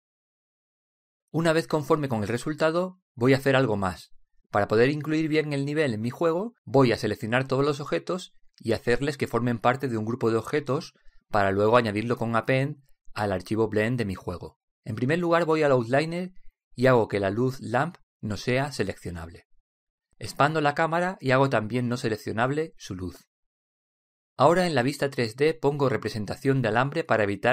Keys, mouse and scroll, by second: 3.3 ctrl+Up, 4.1 middle click, 6.9-9.5 middle drag, 13.5 ctrl+Up, 18.0 click, 21.9-23.6 drag, 26.0 ctrl+Up.